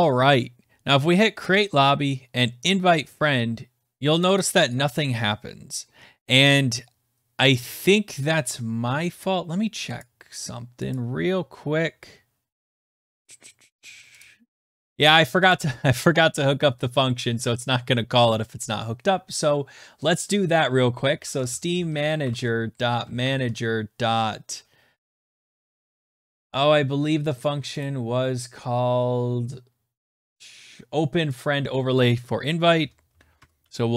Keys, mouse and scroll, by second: 1.4 click, 2.7 click, 4.2 click, 4.4 click, 4.5 click, 4.7 click, 8.2 click, 10.0 click, 11.1 click, 14.3 click, 15.1 click, 15.5 click, 20.5 right click, 20.8-23.6 typing, 27.8 click, 29.4 click, 31.4 click, 32.4-33.9 typing.